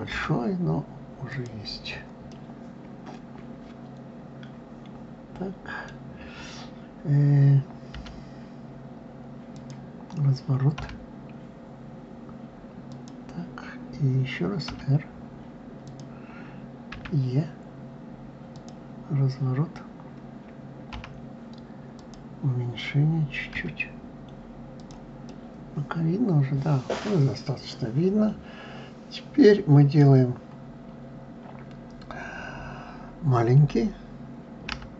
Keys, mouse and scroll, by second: 1.9-5.0 middle drag, 10.4 r, 16.5 e, 23.2 s, 24.9-27.9 middle drag, 29.9-30.6 scroll up 2, 30.6-33.5 scroll down 1.